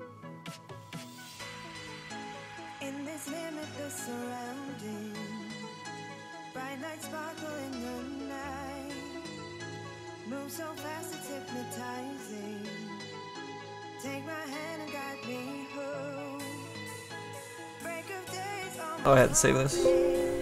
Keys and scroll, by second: 3.6 s.